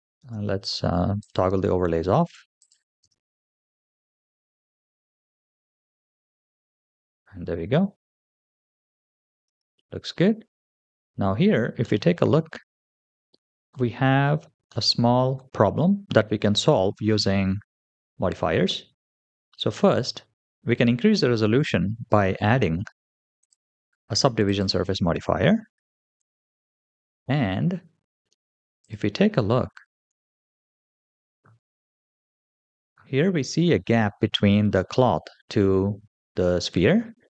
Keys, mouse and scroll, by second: 0.0 space, 1.0 click, 2.4 drag, 2.9 space, 9.3 space, 11.7-12.5 middle drag, 13.2-13.6 shift+middle drag, 14.5-15.2 middle drag, 19.3-19.9 middle drag, 21.7-22.4 scroll down 2, 23.2-24.6 drag, 24.9-26.0 scroll down 2, 26.0 click, 27.1-28.1 scroll up 2, 28.7 click, 29.9 KP_3, 31.8-32.9 scroll up 4, 37.2-37.3 middle drag.